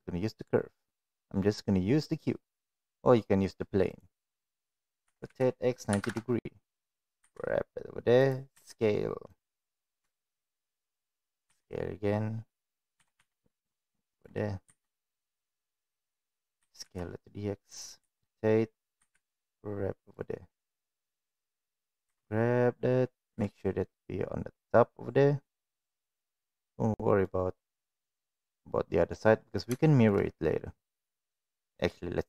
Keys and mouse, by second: 5.0 r, 7.1 g, 8.4 s, 10.1 shift+middle drag, 11.4 s, 12.9 s, 14.6 g, 16.5 g, 17.9 r, 18.9 g, 21.0 middle click, 22.0 g, 26.4 click, 26.6-27.2 middle drag, 27.5-29.1 middle drag, 29.8 shift+middle drag, 31.0 click, 31.7 click.